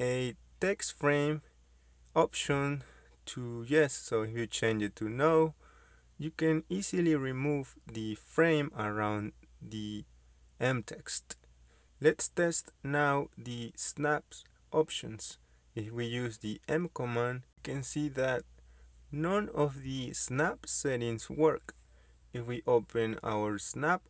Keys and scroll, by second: 12.5 Escape, 13.5-14.5 typing, 16.3 Escape, 18.9 m, 19.3 space.